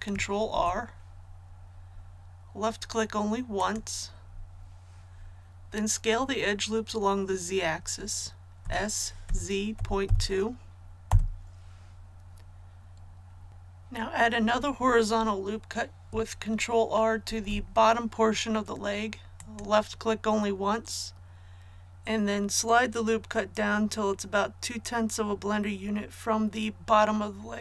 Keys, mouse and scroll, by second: 0.5 ctrl+r, 1.5-3.6 scroll up 1, 3.6-4.6 drag, 8.6 s, 9.2 z, 9.7 KP_Decimal, 10.0 KP_2, 11.0 Return, 13.5 click, 19.4-27.6 drag.